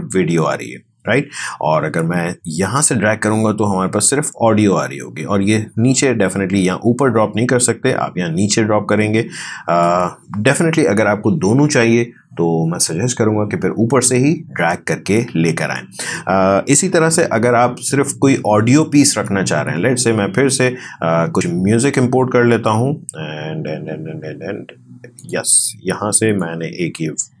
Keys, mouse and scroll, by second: 2.5-15.7 drag, 15.7 click, 16.8 Delete, 21.9 click, 25.5 click, 25.9-27.4 drag.